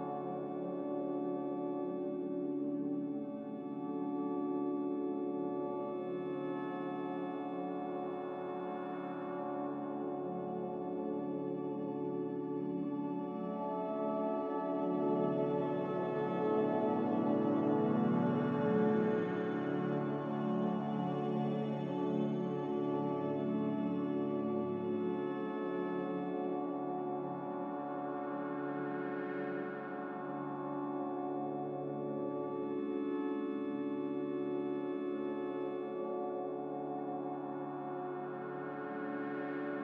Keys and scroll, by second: 2.8 ctrl+z, 6.8-7.6 typing, 15.8 q, 26.8 ctrl+c.